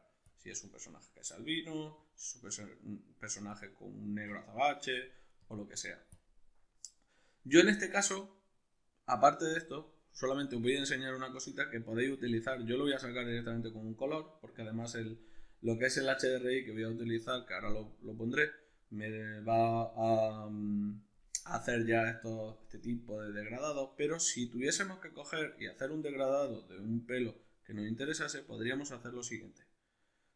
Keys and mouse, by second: 11.0-30.3 middle drag, 28.4 shift+a.